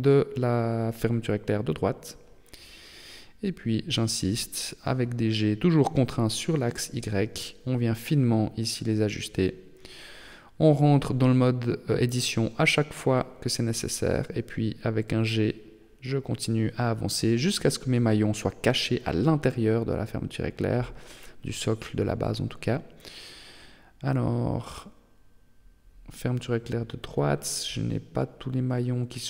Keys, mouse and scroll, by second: 2.0-2.5 scroll up 3, 3.0 right click, 3.4 Tab, 5.1 g, 7.5 Tab, 8.3 middle click, 8.9 shift+middle click, 9.5 scroll up 2, 10.7 Tab, 11.1 g, 13.3 Tab, 14.0 Tab, 14.7 g, 16.8 Tab, 18.3 middle click, 19.8 right click, 20.4 Tab, 21.5 d, 21.8 y, 26.7 y, 27.9 g.